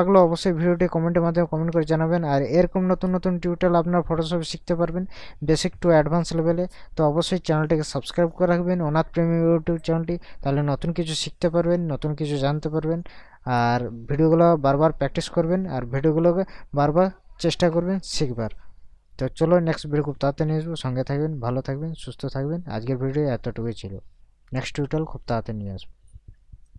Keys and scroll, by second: 0.9 ctrl+KP_Subtract.